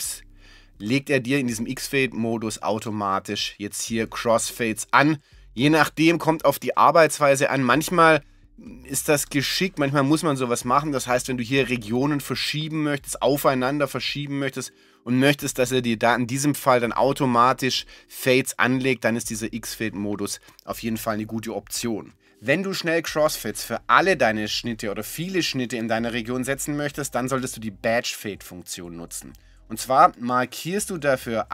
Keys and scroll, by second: 10.7-11.6 typing, 13.7 1.